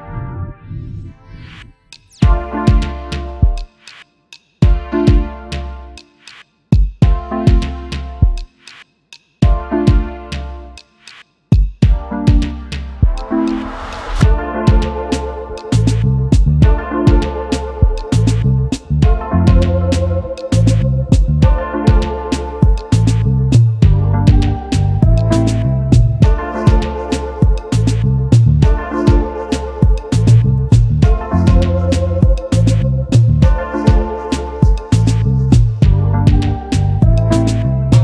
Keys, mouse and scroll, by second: 0.6 alt+click, 1.5 alt+click, 3.4 alt+click, 6.6 v, 7.6-7.9 alt+scroll up 1, 8.1 space, 8.7 alt+scroll down 1, 12.4 alt+scroll up 1, 13.2 space, 13.3 double click, 15.2 alt+scroll up 1, 15.5 alt+click, 15.7 double click, 16.1 space, 17.4 ctrl+g, 18.2 alt+scroll down 1, 18.7 double click, 21.2 space, 25.5-26.4 typing, 28.5 double click, 29.6 ctrl+f, 31.6 alt+scroll down 1, 32.3 alt+scroll up 1, 32.9 double click, 33.2 space, 34.8 space.